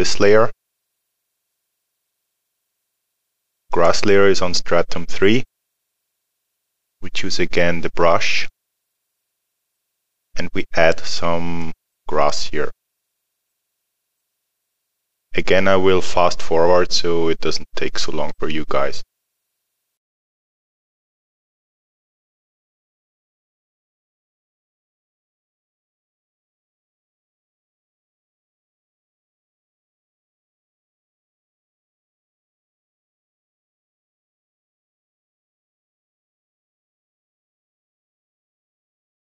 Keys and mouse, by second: 3.7 click, 8.3 click, 11.6 click, 20.7 click, 25.8 alt+middle click, 26.1 click, 27.2 click, 27.4 middle click, 27.6 click, 28.4 middle click, 28.6 click, 29.1 middle click, 29.4 middle click, 29.6 click, 30.6 alt+middle click, 30.9 click, 31.6 middle click, 31.8 click, 32.4 middle click, 32.6 click, 34.1 middle click, 34.7 click, 35.5 middle click, 35.9 middle click, 36.5 click, 38.2 middle click, 38.4 click, 39.3 middle click.